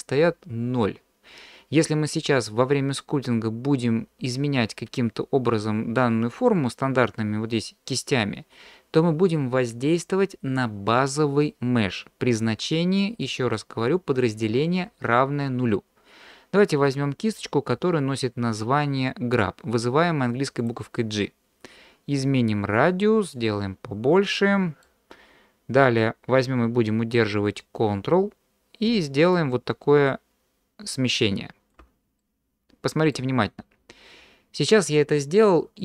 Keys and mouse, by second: 20.7 click, 22.3-23.4 drag, 24.3 middle click, 29.3-31.7 ctrl+drag, 32.2 middle click, 32.6 click, 32.6 right click, 33.1 middle click.